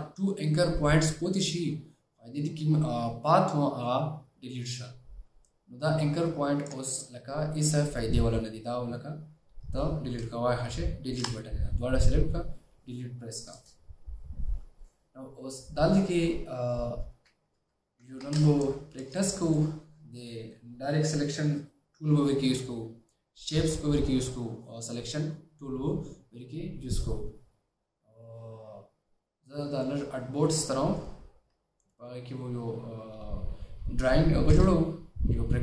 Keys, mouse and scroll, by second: 11.3 Delete, 17.3 alt+scroll down 1, 18.3 alt+scroll down 1, 18.4-19.1 space, 21.8 space, 34.8 shift+o.